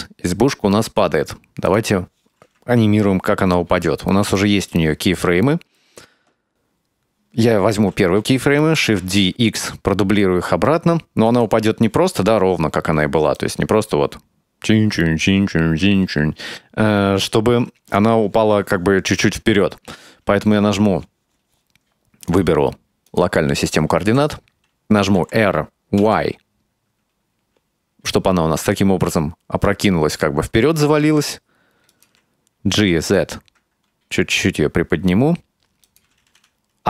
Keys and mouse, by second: 1.8 click, 4.4-5.8 ctrl+middle drag, 6.8-7.2 right drag, 8.7 shift+d, 13.4-18.0 drag, 22.4-23.5 drag, 24.1 r, 25.2 r, 32.8 g.